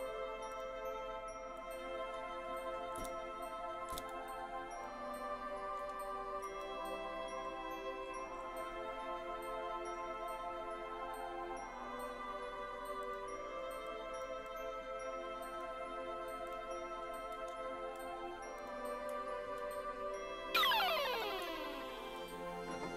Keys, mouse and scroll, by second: 0.6 click, 1.0 scroll up 3, 1.6 middle click, 3.0 KP_1, 3.9 KP_3, 4.8 shift+middle click, 6.6 g, 7.2 scroll up 2, 7.6 scroll down 1, 7.8-8.4 scroll up 3, 8.4-10.6 scroll down 11, 13.2 click, 14.0 click, 14.6-15.6 drag, 16.6 click, 18.6 click, 19.8 right click, 21.0 click, 21.4 z.